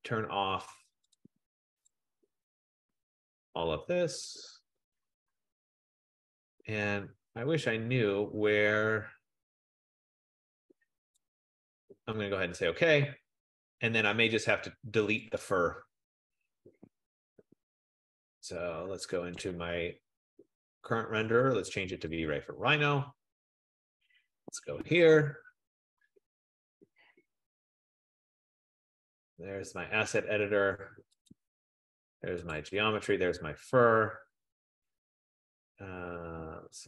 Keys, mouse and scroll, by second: 0.1-1.1 scroll, 1.2 click, 2.1 click, 2.6 click, 3.7 click, 4.5 click, 5.0 click, 6.1 click, 11.3 click, 13.1 click, 15.6 click, 19.6 F15, 19.6 click, 22.4 click, 24.2 click, 28.1 click, 31.4 click, 32.6 click, 33.5 right click.